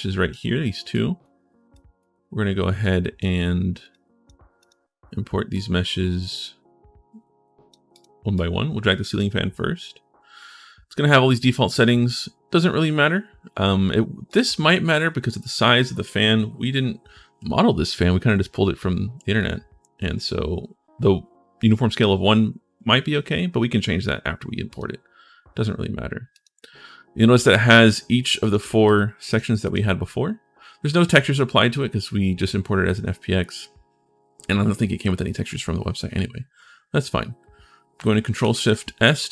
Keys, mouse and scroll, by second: 0.7 click, 1.5 click, 2.6 click, 3.7 click, 4.4 click, 5.3-7.5 drag, 7.7 click, 8.1 click, 12.0 click, 14.0 click, 24.4 click, 26.1 click, 28.2 click, 28.6 click, 29.0 click, 29.4 click, 38.2 ctrl+shift+s.